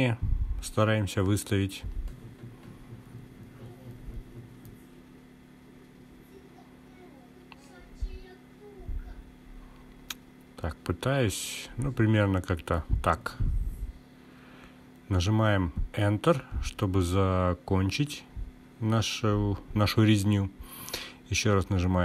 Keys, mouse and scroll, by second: 19.8 k.